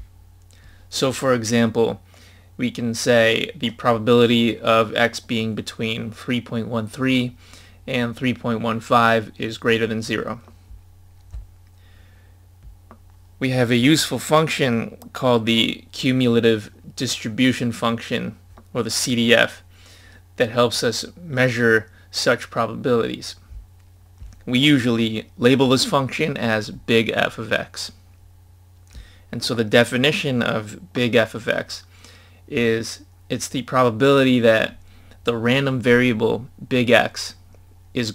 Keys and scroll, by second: 0.2-2.1 scroll down 1, 12.1-14.3 scroll down 2.